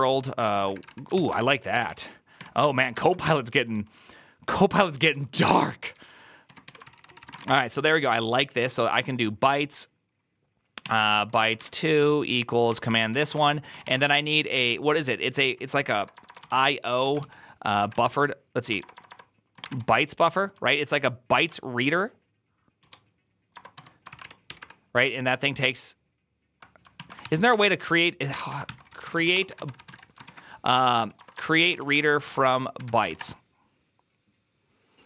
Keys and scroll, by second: 0.0-8.5 typing, 2.3 Tab, 2.4 ctrl+c, 10.5-20.3 typing, 21.2 ctrl+y, 22.7-24.9 typing, 26.9 ctrl+o, 27.1-33.4 typing, 28.5 ctrl+t.